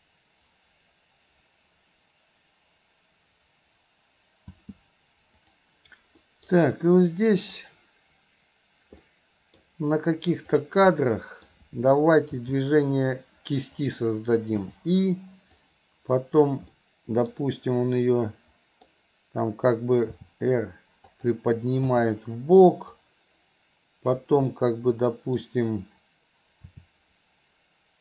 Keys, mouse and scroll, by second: 5.1 space, 5.6 drag, 6.3 middle click, 7.6-8.3 drag, 9.2-9.6 middle drag, 10.6 drag, 11.0 middle click, 12.3 r, 15.7-16.6 drag, 16.8-17.3 middle drag, 18.3-18.9 middle drag, 20.2 r, 23.1-24.3 drag, 24.5-25.4 middle drag, 26.8 r.